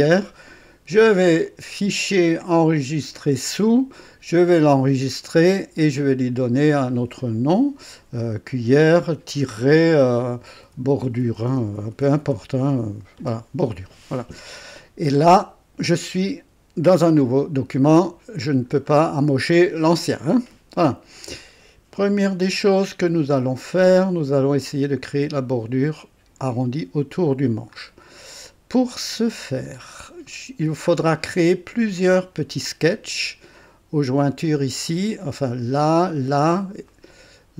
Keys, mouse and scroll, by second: 1.4 click, 3.0 click, 5.9 click, 7.9 BackSpace, 9.4-13.7 typing, 14.8 scroll up 1, 17.9 right click, 18.8 scroll down 1, 19.4-19.7 scroll up 1, 19.9 right click, 21.4-23.3 drag, 23.5-23.8 scroll down 2, 24.0 right click, 24.0 click, 27.7-28.1 scroll up 2, 28.3 right click, 29.6-30.0 scroll up 2, 30.3 right click, 31.0-31.5 scroll down 1, 36.9 right click.